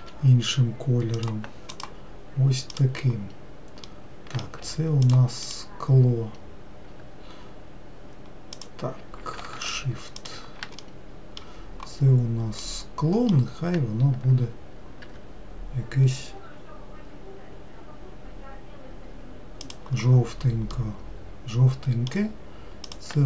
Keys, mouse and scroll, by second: 0.6 g, 2.3 click, 3.3 click, 4.4-5.6 middle drag, 5.6 ctrl+click, 6.1 ctrl+click, 9.1 click, 10.8 shift+click, 11.3-15.6 middle drag, 15.6 g, 21.2-23.2 middle drag.